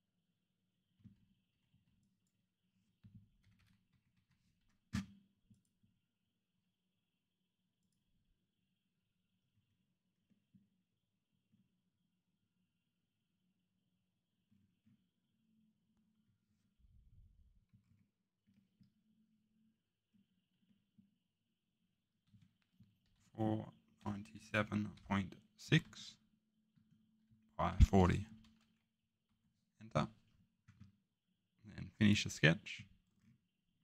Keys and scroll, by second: 1.5 Escape, 1.7 Escape, 3.4 Delete, 3.5 Delete, 3.9 Escape, 4.1 2, 22.2 Tab, 23.0-29.4 typing, 29.2 Return.